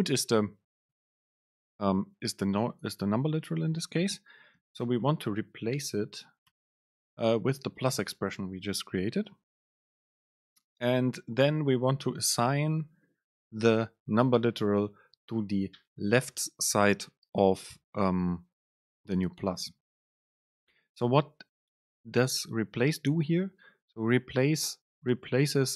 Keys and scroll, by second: 0.7 super+space, 5.5 super+space, 9.1 Down, 9.4 Up, 10.0 Up.